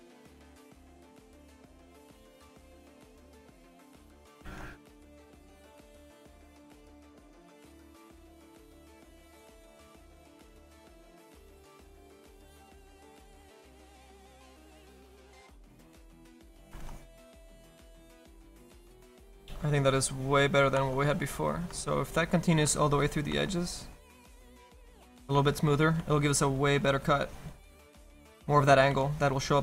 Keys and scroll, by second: 4.5 ctrl+z, 26.6 s, 28.9 s.